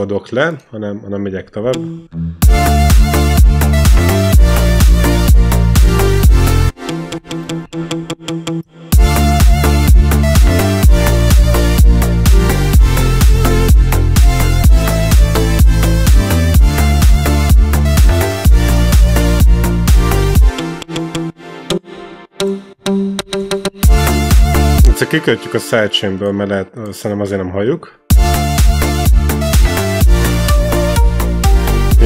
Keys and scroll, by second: 1.5 e, 1.8 c, 2.3 space, 6.5 space, 6.7 e, 8.7 space, 16.4 ctrl+Up, 20.2 space, 20.4 e, 21.5 r, 22.2 t, 23.7 space, 27.9 space.